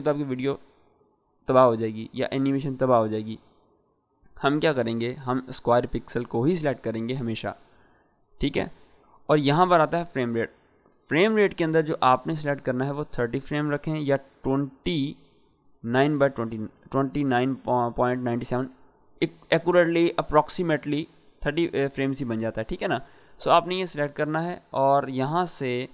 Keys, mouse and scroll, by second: 3.8 click, 8.9 click, 13.5 click, 25.4-25.9 drag.